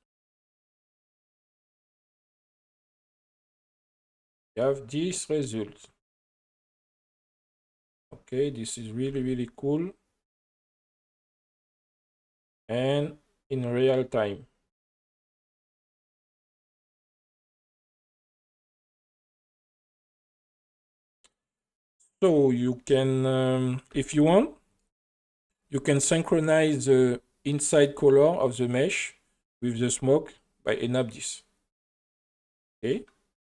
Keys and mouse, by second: 1.9 space, 2.7-3.9 middle drag, 4.6 middle click, 9.1 r, 9.2 r, 19.5 click, 23.9 space, 24.2 middle click, 30.4 click.